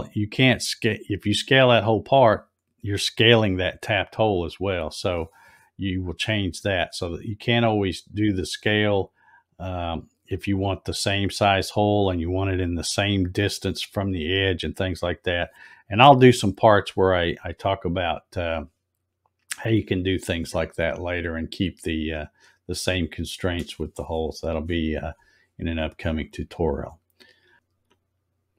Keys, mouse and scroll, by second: 21.2 click, 26.4 scroll up 2, 26.8 middle click.